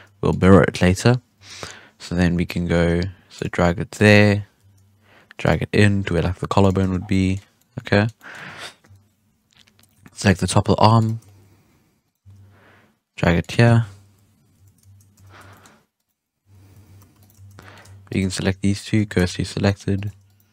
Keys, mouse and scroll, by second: 0.9 KP_7, 1.3 KP_3, 2.2 z, 2.7 g, 3.9 right click, 4.3 scroll up 1, 4.5 g, 6.2 scroll up 1, 6.3 g, 6.7 z, 6.9 scroll down 4, 7.0-7.5 middle drag, 7.5-7.9 scroll down 1, 7.9-8.8 middle drag, 8.8 KP_1, 9.8 right click, 10.0 shift+middle drag, 10.1 scroll up 4, 10.3 g, 11.2 shift+middle drag, 11.4-12.0 scroll down 3, 12.0 right click, 12.1 g, 13.9 KP_3, 14.5 z, 15.1 z, 15.3 Tab, 15.5-15.9 middle drag, 15.9 right click, 16.1 scroll down 1, 16.1 middle drag, 16.4 Tab, 16.7 alt+a, 16.9 3, 17.1 right click, 17.5-18.0 middle drag, 18.0 shift+right click, 18.4 shift+s, 19.1 Tab, 19.6-19.9 middle drag, 19.9 right click, 20.0 Tab, 20.2 right click.